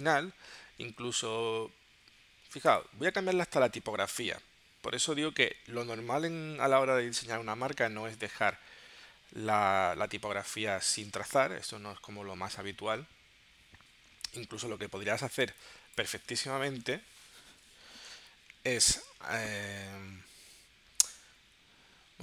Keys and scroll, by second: 15.5 space.